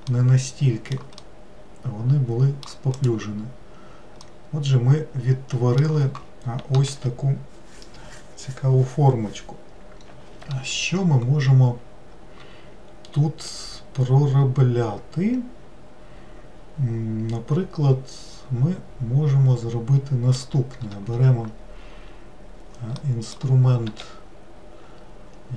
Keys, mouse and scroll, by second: 0.1-3.0 middle drag, 3.0 click, 4.3-7.3 middle drag, 13.5-16.5 middle drag, 23.0-23.9 middle drag, 23.9 w.